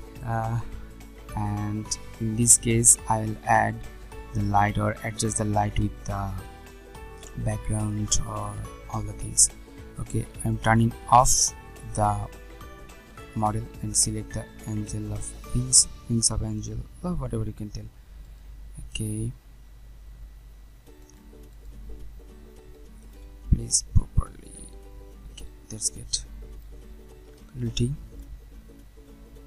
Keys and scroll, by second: 27.2 ctrl+t.